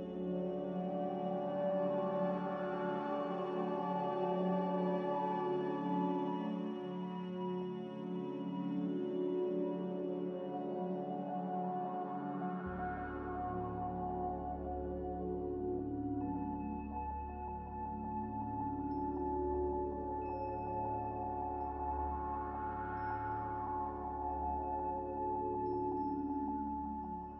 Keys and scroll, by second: 9.0 a, 23.4 ctrl+z.